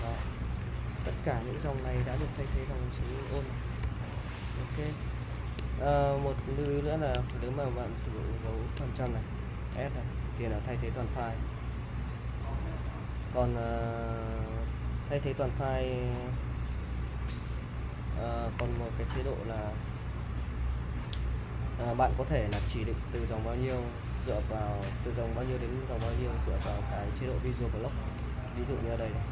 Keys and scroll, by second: 0.6-4.1 typing, 6.4 shift+;, 8.4 shift+5, 9.7 s, 16.8 BackSpace, 17.0 BackSpace, 17.2 BackSpace, 17.3 BackSpace, 18.6 typing, 27.7-29.3 typing.